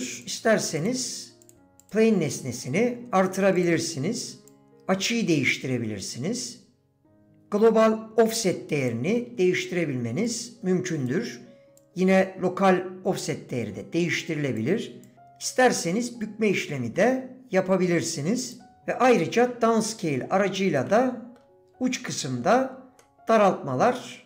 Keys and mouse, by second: 0.3 click, 0.8 click, 1.0 click, 1.4 click, 1.9-7.4 drag, 7.7-8.9 drag, 10.4 click, 11.9-14.6 drag, 15.1-18.6 drag, 18.8-20.6 drag, 20.8 middle click, 22.1 middle click, 23.0 middle click, 23.9 middle click.